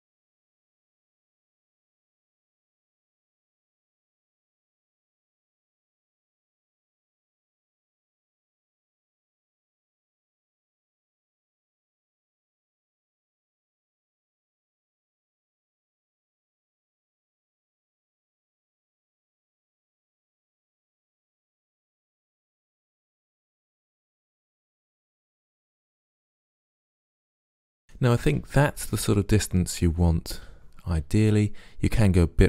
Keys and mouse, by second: 0.3 middle click, 1.5 middle click, 2.0 ctrl+z, 2.2 Delete, 4.0 middle click, 4.4 click, 4.7 middle click, 5.0 Delete, 5.2 middle click, 6.0 click, 6.6 click, 6.8 Delete, 7.3 Delete, 8.5 right click, 8.8 g, 9.1 click, 9.4 middle click, 9.8 right click, 9.9 Delete, 10.5 click, 10.7 click, 11.1 ctrl+z, 11.3 click, 12.2 click, 13.0 Delete, 13.6 Delete, 14.6 ctrl+z, 15.3 ctrl+z, 16.6 Delete, 17.0 click, 17.5 Delete, 17.5 click, 18.0 click, 18.6 right click, 19.2-20.3 middle drag, 20.4 ctrl+z, 20.6 click, 21.1 middle click, 21.9 Delete, 22.5 right click, 23.6 right click, 24.0 right click, 24.2 middle click, 24.5 ctrl+z, 24.9 Delete, 26.7 middle click, 27.2 Delete, 27.4 middle click, 27.8-29.6 middle drag.